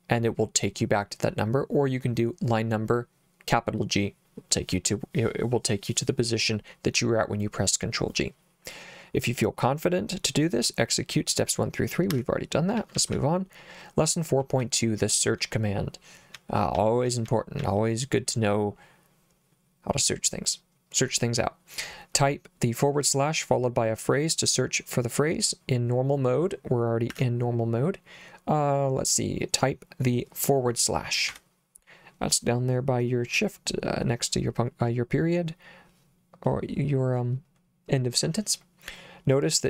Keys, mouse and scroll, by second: 12.1 Escape, 12.8 j, 13.0 j, 13.1 j, 14.6 j, 16.3-17.6 typing, 27.1 Escape, 31.3 /.